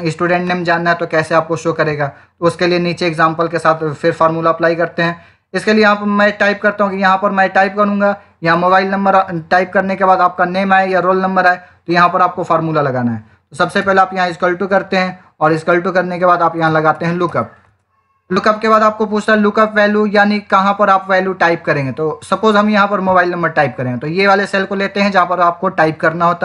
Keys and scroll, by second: 13.7 =, 16.3-17.7 typing.